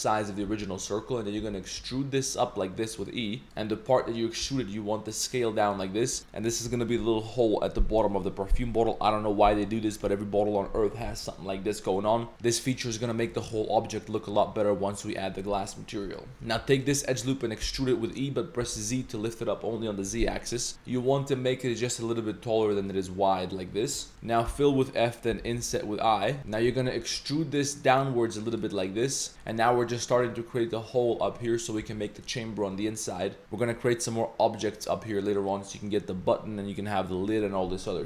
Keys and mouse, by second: 0.5 z, 0.6 click, 1.8 s, 1.8 e, 3.4 g, 4.4 s, 16.3 g, 16.4 2, 16.7 alt+click, 17.1 middle click, 17.6 e, 22.8-23.9 middle drag, 24.1 shift+middle click, 24.5 f, 25.3 i, 26.4 click, 26.4 z, 27.0 e, 28.7 click, 29.3 z, 31.4 click, 31.8 z.